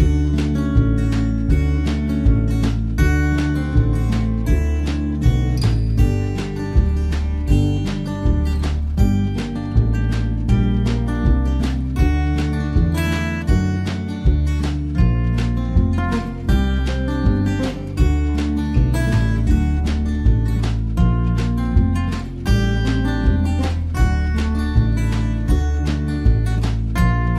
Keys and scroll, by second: 17.7 ctrl+t.